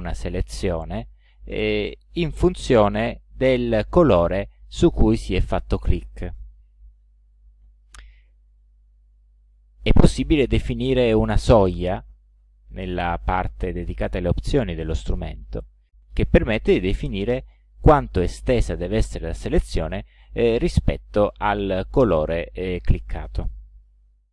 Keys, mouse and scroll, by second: 17.1 click, 18.7 click.